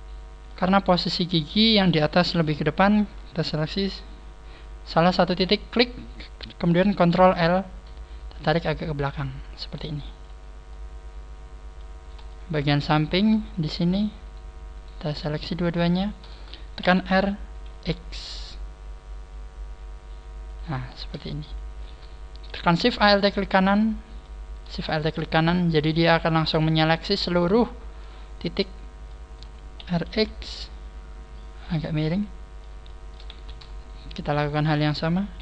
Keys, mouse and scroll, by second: 0.4 shift+middle click, 2.1 KP_3, 2.3 middle click, 5.5 right click, 7.1 ctrl+l, 8.4 click, 10.6 middle click, 12.2 shift+middle click, 13.1 right click, 13.5 shift+right click, 13.9 shift+right click, 14.1 shift+right click, 14.7 shift+right click, 15.1 shift+right click, 16.7 shift+right click, 16.7 r, 20.9 click, 20.9 middle click, 21.6 a, 22.8 alt+shift+right click, 23.5 middle click, 24.5 middle click, 24.7 a, 24.9 middle click, 24.9 alt+shift+right click, 25.1 middle click, 26.8 middle click, 28.7 middle click, 29.7 middle click, 29.7 r, 31.5 click, 31.9 middle click, 32.8 shift+middle click, 33.2 click, 33.2 shift+middle click, 33.2 a, 33.7 alt+shift+right click, 34.4 alt+shift+right click, 35.3 r.